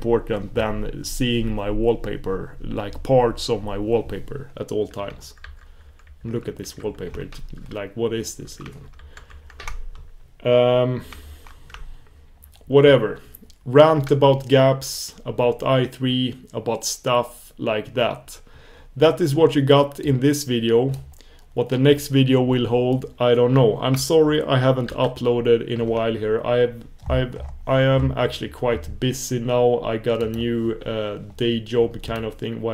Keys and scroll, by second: 9.3 super+1, 25.2 super+f, 30.4 super+f.